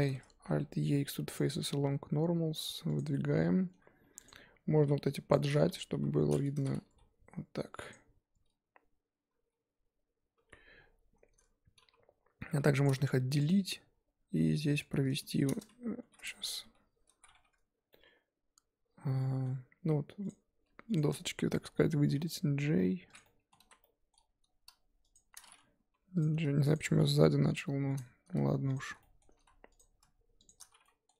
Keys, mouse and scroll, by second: 1.3 alt+e, 3.1-4.2 middle drag, 4.2 click, 4.8 z, 5.3 Left, 5.9 KP_1, 6.6 z, 6.8 s, 10.5 z, 10.7-11.1 scroll down 3, 11.1 scroll up 1, 12.8 p, 13.0 Tab, 13.4 click, 13.7 Tab, 13.9 scroll up 2, 14.6 Tab, 16.0 shift+h, 16.3 Tab, 17.2 z, 17.3 1, 17.9-20.3 middle drag, 20.3 click, 20.9 shift+click, 22.1 j, 23.1 click, 23.2 middle click, 23.6 z, 23.7 scroll up 1, 23.8-25.1 middle drag, 25.1 shift+click, 25.9 j, 26.2 click, 26.7 shift+click, 27.5 j, 27.9 click, 28.7 shift+click, 29.0 middle click, 29.3 ctrl+z, 29.8 click, 30.5 shift+click, 30.8 middle click.